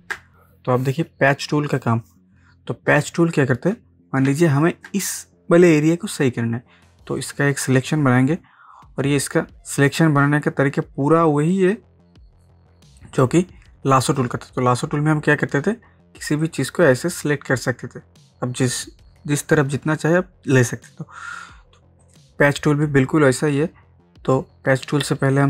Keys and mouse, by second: 0.9-3.0 drag, 3.0 ctrl+space, 3.2 ctrl+click, 3.5 ctrl+space, 4.3 ctrl+space, 4.4 ctrl+click, 4.8 ctrl+space, 7.3-14.1 drag, 16.4-22.0 drag, 25.2-25.4 drag.